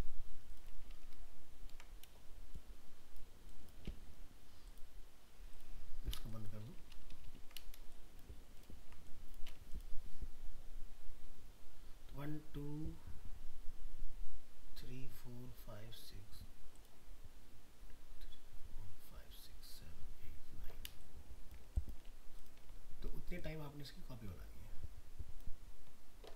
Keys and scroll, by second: 1.1 ctrl+-, 7.1 ctrl+-, 8.3 ctrl+space.